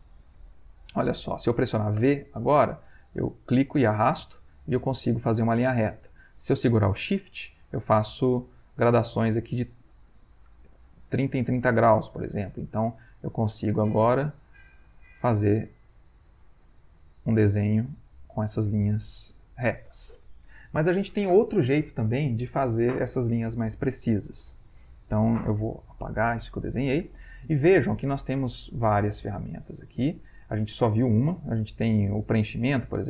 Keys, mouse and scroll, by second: 2.0 v, 2.9-12.8 drag, 16.3-20.7 shift+drag, 26.0 Delete.